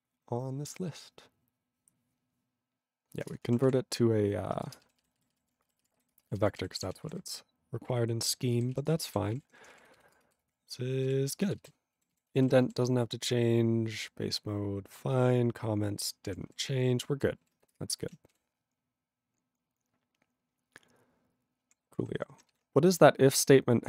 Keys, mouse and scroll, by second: 3.3 Return, 3.6 ctrl+s, 4.9 alt+b, 5.8 ctrl+b, 6.1 ctrl+space, 6.5 ctrl+alt+f, 6.6 ctrl+g, 6.9 ctrl+s, 7.0 ctrl+n, 7.1 ctrl+a, 7.2 ctrl+n, 7.7 ctrl+n, 8.8 ctrl+s, 8.9 ctrl+space, 8.9 ctrl+e, 9.1 ctrl+g, 9.3 ctrl+p, 9.3 ctrl+a, 9.5 ctrl+p, 9.8 ctrl+f, 10.1 ctrl+space, 10.6 ctrl+alt+f, 11.0 ctrl+g, 11.3 ctrl+space, 11.7 ctrl+alt+b, 12.0 ctrl+a, 12.1 ctrl+g, 12.5 ctrl+s, 12.6 ctrl+v, 12.7 ctrl+n, 13.2 ctrl+n, 15.0 ctrl+p, 15.5 ctrl+p, 16.6 ctrl+s, 16.9 ctrl+n, 17.8 Return, 22.0 q.